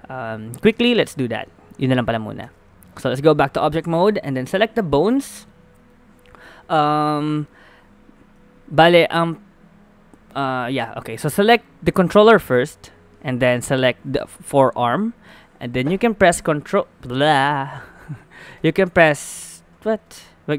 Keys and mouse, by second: 0.7 shift+space, 2.5 ctrl+Tab, 5.3-7.3 middle drag, 10.8 a, 11.6 click, 12.2 middle click, 12.6 middle click, 13.3 click, 16.3 ctrl+i, 17.4-19.5 drag, 18.5 i, 19.9 shift+i.